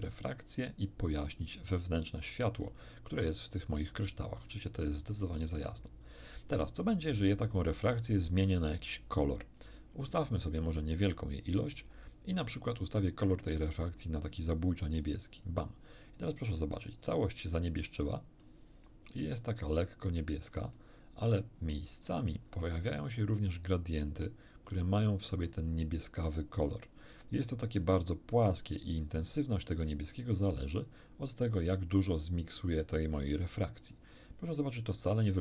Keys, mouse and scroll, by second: 3.1 scroll down 1, 4.5 middle click, 5.3 middle click, 6.2 middle click, 9.5-12.1 drag, 12.6 click, 13.9-15.6 drag, 16.5-17.8 middle drag, 18.0 middle click, 18.9 middle click, 20.3 middle click, 21.4 middle click, 22.4-23.0 scroll up 2, 27.8-28.9 drag, 30.7 click.